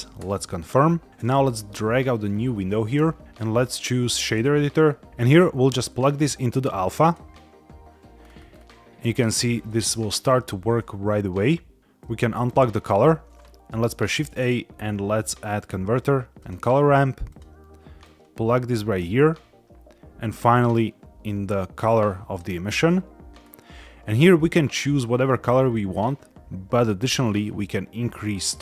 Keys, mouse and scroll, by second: 0.1 KP_Enter, 1.1 click, 2.1 click, 3.2 ctrl+shift+z, 3.4-4.3 drag, 5.1 Escape, 5.1 click, 5.1-5.4 scroll up 1, 5.8-7.0 drag, 8.1-8.5 scroll up 3, 9.6 shift+middle drag, 10.0 scroll down 2, 11.3 click, 11.8 middle click, 11.9-12.3 drag, 13.8 shift+a, 17.2 click, 17.9-18.9 drag, 20.5-22.3 drag, 23.3 scroll up 2, 25.6 middle click, 27.1-28.6 drag.